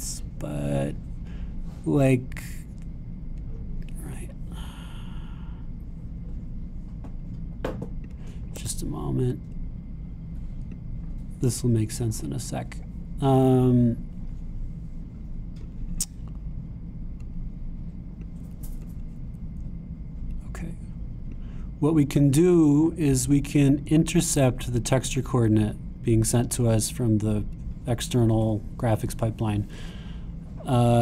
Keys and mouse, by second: 5.1-9.1 drag, 9.6 x, 11.7-31.0 drag.